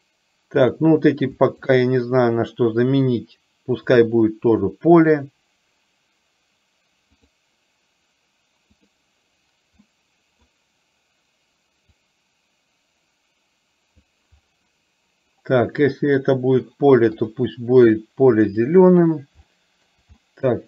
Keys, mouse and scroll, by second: 0.8 click, 1.6 shift+click, 4.0-7.4 drag, 9.0 click, 9.9-10.5 middle drag, 12.0-14.1 drag, 15.9 middle click, 19.6 shift+middle click, 20.3 middle click.